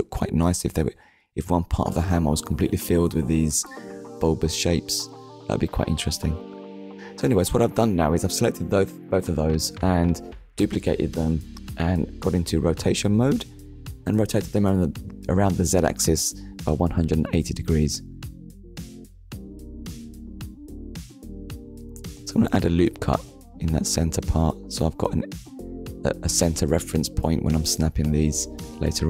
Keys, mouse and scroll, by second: 0.7 click, 2.1 click, 3.5 click, 4.0 middle click, 6.1 click, 7.3 ctrl+click, 10.1 middle click, 12.1 click, 12.9 middle click, 17.9 click, 19.2 Tab, 20.7 ctrl+r, 21.4 click, 22.1 right click, 23.6 Tab, 24.3 middle click, 25.9 click, 27.1 middle click.